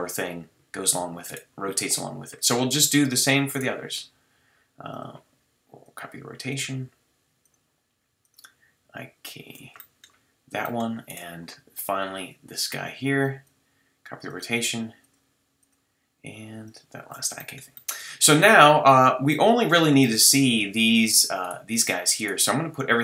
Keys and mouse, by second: 1.3-2.7 middle drag, 2.7-4.9 drag, 6.0-9.8 drag, 9.8-10.6 middle drag, 11.1-12.8 middle drag, 14.3-17.8 drag, 18.0 drag, 18.4-18.7 drag.